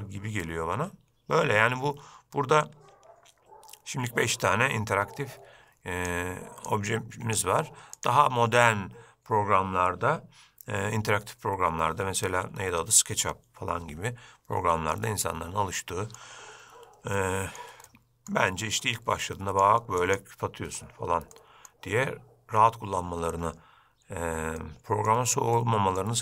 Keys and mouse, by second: 2.9-6.3 drag, 6.8-8.2 drag, 15.4-16.3 middle drag, 17.3-17.7 shift+middle drag, 18.0-18.5 middle drag, 18.7-19.0 shift+middle drag, 19.4-20.3 drag, 21.5-21.8 middle drag, 24.7-25.2 shift+middle drag, 25.7-26.1 middle drag.